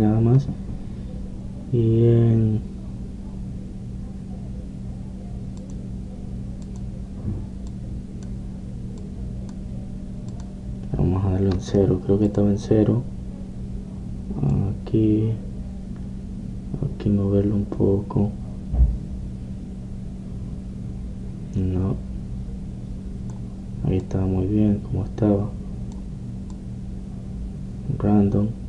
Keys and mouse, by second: 6.7-14.3 drag, 15.6-17.5 drag, 25.1-27.0 drag.